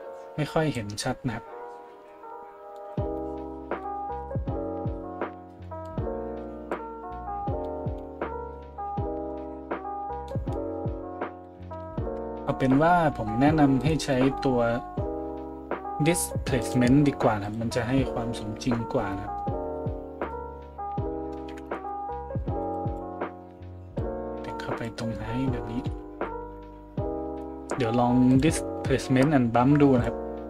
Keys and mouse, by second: 13.8 middle click, 13.8 right click, 25.8 a.